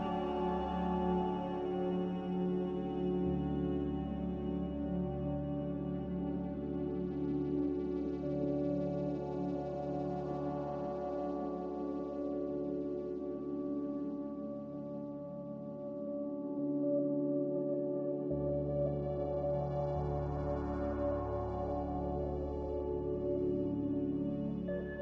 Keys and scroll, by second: 13.2 1, 14.7 2, 19.4 q, 19.6 q.